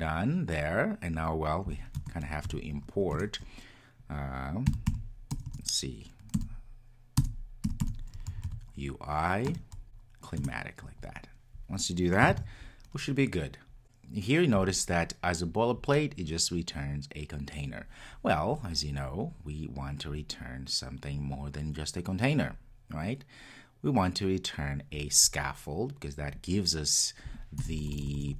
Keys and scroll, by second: 3.1 Return, 10.4 Return, 13.6 super+s.